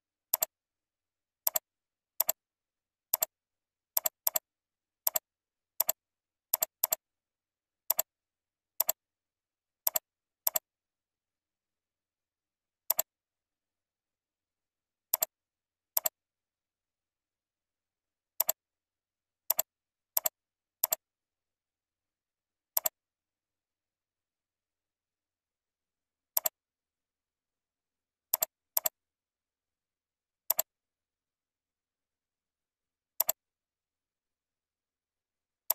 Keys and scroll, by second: 27.5 ctrl+r.